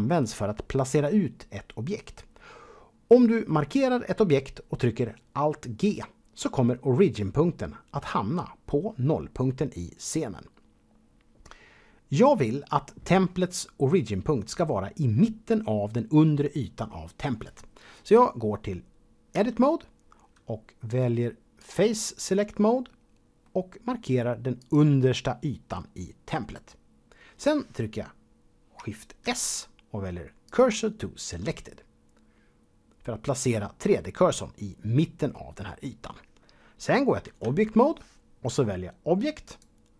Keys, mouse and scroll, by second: 19.3 Tab, 21.6 click, 22.5 middle click, 24.6 click, 29.2 shift+s, 30.4 click, 37.4 Tab.